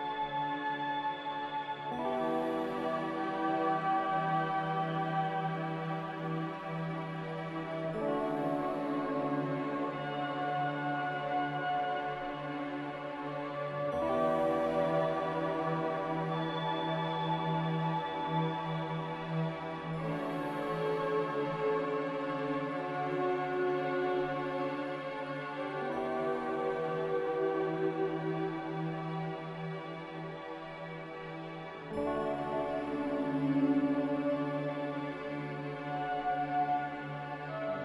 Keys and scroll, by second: 4.2 a, 6.0 typing, 6.1 Return, 7.1 typing, 12.1 ctrl+s, 16.8 ctrl+c, 20.5 ctrl+r, 23.6 Escape, 25.1 Delete, 25.1 ctrl+c, 26.6 ctrl+r, 37.7 z.